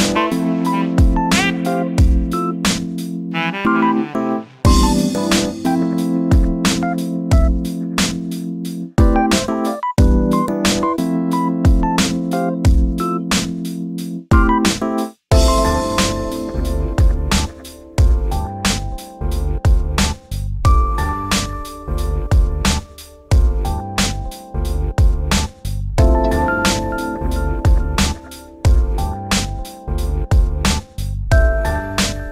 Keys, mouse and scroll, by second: 0.0 shift+click, 0.5 shift+click, 1.0 shift+click, 1.3 shift+click, 1.9 shift+click, 2.5 shift+click, 2.9 shift+click, 3.9 middle click, 4.1 scroll down 2, 4.3 shift+middle click, 4.5 scroll up 2, 4.7-6.0 middle drag, 6.0 e, 8.6 scroll down 3, 8.7 middle click, 9.6 alt+z, 10.3 scroll up 1, 10.5-12.0 middle drag, 12.8 shift+middle drag, 13.0 scroll up 1, 13.2 middle drag, 13.4-13.7 scroll down 4, 13.7 shift+middle click, 14.0-14.4 scroll up 1, 14.4 3, 15.2 KP_7, 16.4 click, 17.3 shift+click, 18.7 shift+click, 19.9 shift+click, 20.9 shift+click, 21.9-22.5 scroll up 7, 22.6 shift+click, 23.3 shift+click, 23.6-24.1 shift+scroll down 4, 24.1 shift+middle click, 24.4-25.0 scroll up 6, 25.1 shift+click, 26.1 shift+click, 26.7-27.0 scroll down 5, 27.0 shift+middle click, 27.5-28.4 scroll up 4, 28.4 shift+click, 28.7-29.1 scroll down 2, 29.4 scroll up 1, 29.7 click, 30.0 scroll down 1, 30.2 shift+middle click, 30.6-31.1 scroll up 5, 31.1 shift+click, 32.1 shift+click.